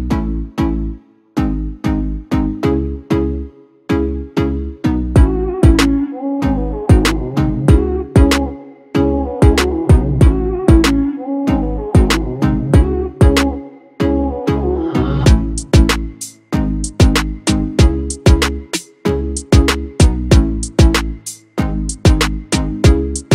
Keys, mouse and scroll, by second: 15.0 double click.